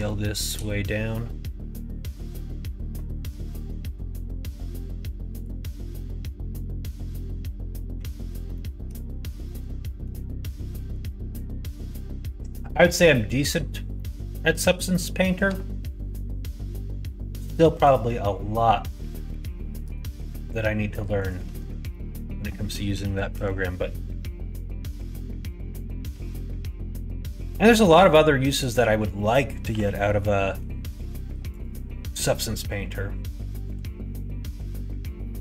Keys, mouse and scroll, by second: 8.6 middle click, 9.5 middle click, 9.9 middle click, 10.8 middle click, 14.0 middle click, 15.4 s, 18.3 middle click, 19.0 shift+middle click, 19.8 g, 21.5 ctrl+z, 21.8 middle click, 22.9 KP_1, 23.3 KP_3, 26.0 g, 29.6 r, 33.7 KP_1.